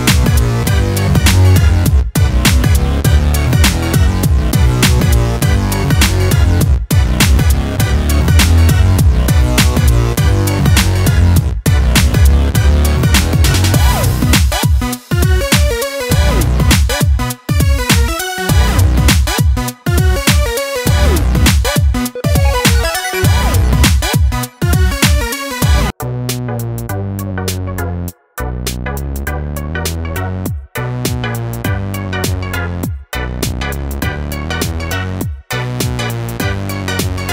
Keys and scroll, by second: 1.0-1.8 [.